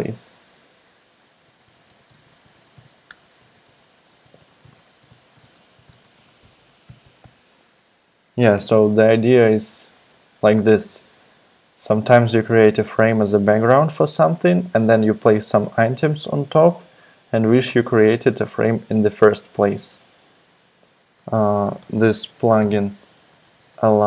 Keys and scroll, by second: 1.2-8.2 typing, 21.1-24.0 typing.